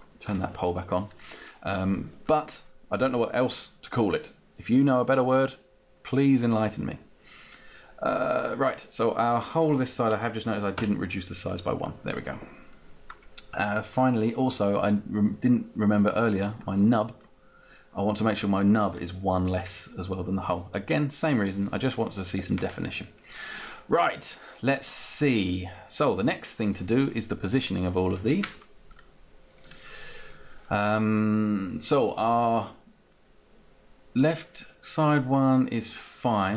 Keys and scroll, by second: 10.7 Down, 19.7 Down.